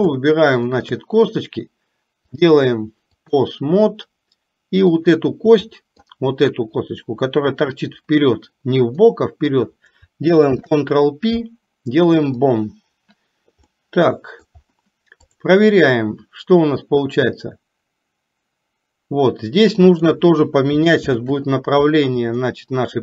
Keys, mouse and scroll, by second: 0.9 shift+click, 2.5-3.6 drag, 5.7 middle click, 9.0 middle click, 13.7-14.5 middle drag, 17.4 click, 17.6-20.1 drag, 21.2 ctrl+z, 22.5-23.0 middle drag.